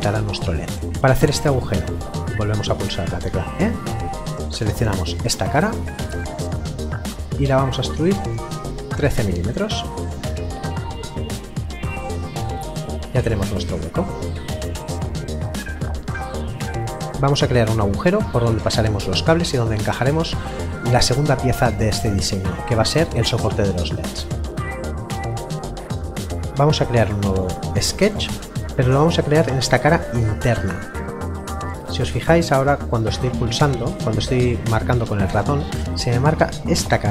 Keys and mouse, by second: 3.2 e, 5.2 click, 6.0 middle click, 8.8 KP_3, 11.2 Return, 11.8 middle click, 16.9 middle click, 28.0 click.